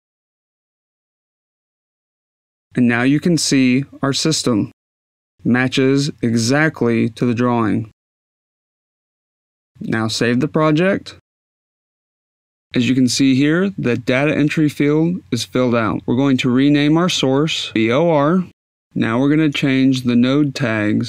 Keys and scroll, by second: 10.8-12.8 typing, 18.1-19.3 typing, 20.5 a.